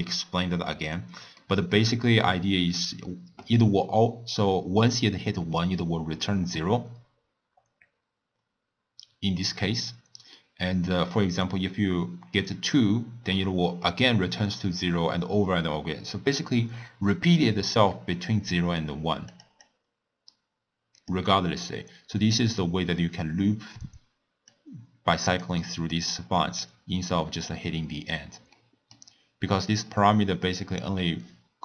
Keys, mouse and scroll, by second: 1.4-4.4 middle drag, 19.3 click, 19.6-22.6 drag, 24.5 click, 26.2-31.5 middle drag.